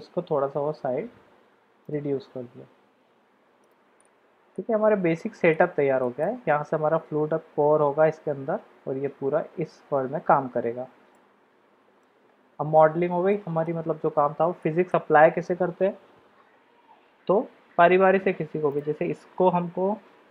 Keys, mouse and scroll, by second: 0.2 s, 2.8 g, 4.5-5.6 middle drag, 6.0 shift+middle click, 11.1-12.1 middle drag, 13.3-13.6 shift+middle drag, 14.6 shift+middle click.